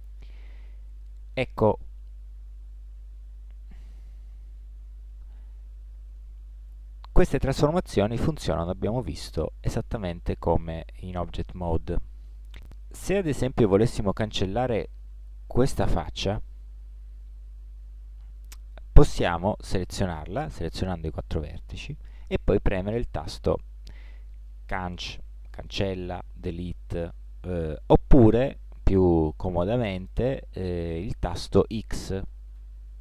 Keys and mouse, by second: 1.8-3.4 middle drag, 3.4 ctrl+z, 3.9 ctrl+z, 4.3 ctrl+z, 7.3-9.9 middle drag, 12.5-18.1 middle drag, 23.1 middle click, 31.2 middle click, 32.6 x.